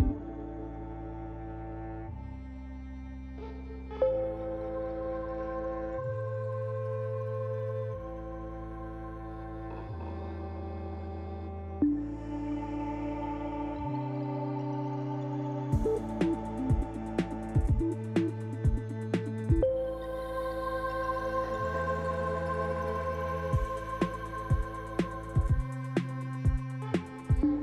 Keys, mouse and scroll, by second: 0.3 shift+middle click, 1.3-1.8 scroll up 3, 1.8 click, 2.1 Tab, 2.7 click, 3.8 shift+click, 4.5 click, 5.3 click, 5.9 click, 6.2 click, 7.6 click, 8.3 click, 8.8 Tab, 10.8-11.4 scroll down 2, 11.4-12.0 scroll down 3, 12.4 shift+middle click, 12.4-12.9 scroll down 1, 14.2 shift+middle click, 14.8 middle click, 16.3-16.6 scroll down 3, 16.8 shift+middle click, 17.7-18.1 scroll up 2, 18.4 click, 19.4 Tab, 20.4 middle click, 21.9 scroll up 2, 22.9 shift+middle click, 24.6 click, 25.0 shift+click, 25.6 click, 25.9 click, 26.4 click, 26.7 click.